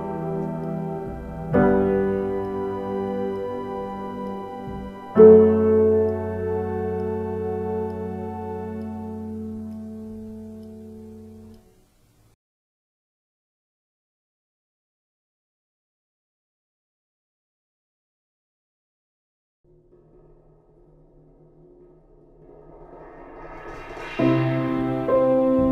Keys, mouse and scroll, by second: 3.3 ctrl+t, 15.3 ctrl+space, 16.6 space, 20.0 x, 20.9 b.